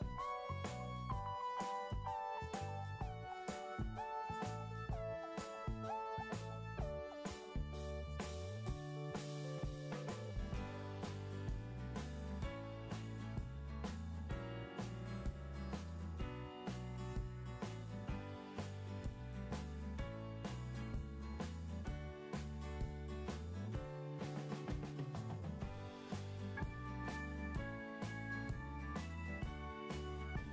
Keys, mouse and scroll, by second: 18.5 Delete.